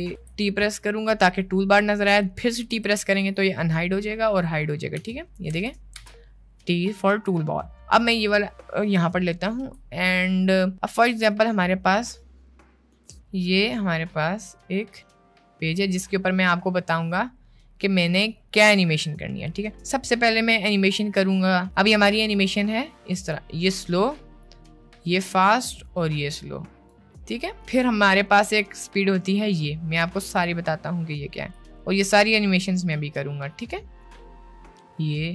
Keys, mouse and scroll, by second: 0.1 t, 2.7 t, 4.9 t, 5.5 t, 5.9 t, 8.1 click, 8.9 shift+middle click, 11.0-16.4 drag, 21.7 click, 23.2-26.9 drag, 29.0-30.3 drag, 31.5-33.3 drag, 34.0 click.